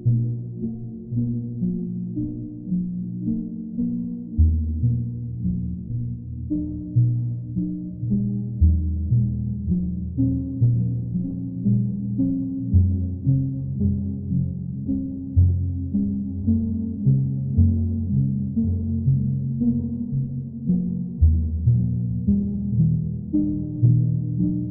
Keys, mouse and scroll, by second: 0.9 click, 1.0 ctrl+z, 3.7 click, 6.1 click, 8.3 click, 8.6 shift+click, 9.1 shift+click, 9.2 alt+click, 10.4 click, 11.4 shift+click, 12.6 alt+click, 15.2 click, 17.3 click, 18.0 click, 18.4 shift+click, 18.9 alt+click, 21.1 click, 22.7 click.